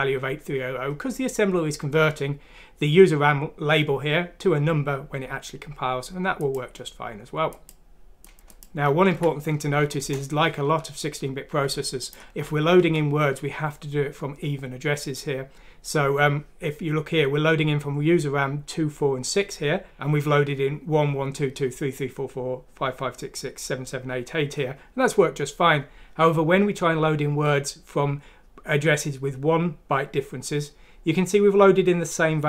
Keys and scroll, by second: 8.3 F6, 10.0 Return, 11.5-12.8 typing.